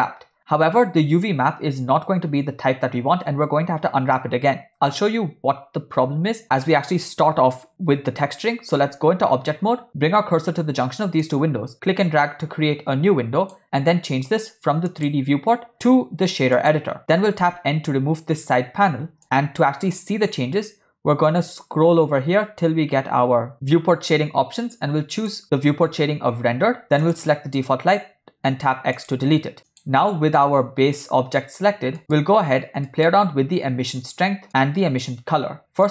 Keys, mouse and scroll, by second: 8.9 Tab, 11.3-13.5 drag, 15.0-16.7 drag, 18.4 n, 19.2 middle click, 20.1 middle click, 21.3-21.9 scroll down 2, 22.1 scroll down 3, 22.6 scroll down 1, 25.9 click, 27.0 click, 28.6 x, 29.7 click, 32.0 ctrl+middle click, 32.9 middle click, 34.9 middle click.